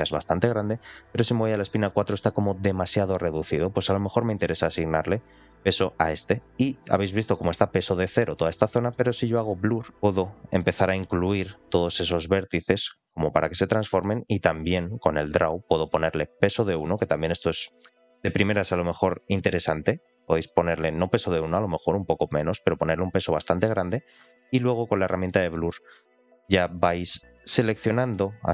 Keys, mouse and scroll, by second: 0.3 scroll up 2, 0.7 shift+middle click, 1.4 ctrl+click, 1.8 shift+middle click, 3.2 middle click, 3.8 scroll up 2, 4.1 shift+middle click, 6.6 scroll down 2, 8.1-8.5 scroll up 2, 8.5 middle click, 9.9 click, 11.0 middle click, 11.8 click, 14.7 click, 15.5 click, 16.8 middle click, 17.4-17.8 scroll down 1, 17.8 middle click, 18.4-19.4 drag, 19.8 click, 20.1 click, 21.5 click, 22.4-23.8 drag, 24.1 middle click, 25.0 click, 25.5 shift+middle click, 25.9 click, 27.7 middle click.